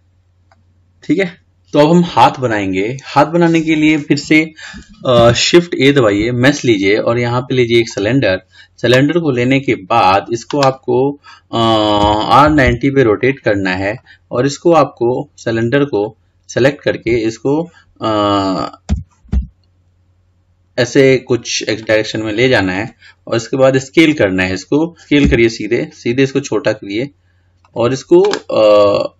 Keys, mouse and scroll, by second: 0.0-1.4 middle drag, 14.2 drag, 16.1 click, 19.1 g.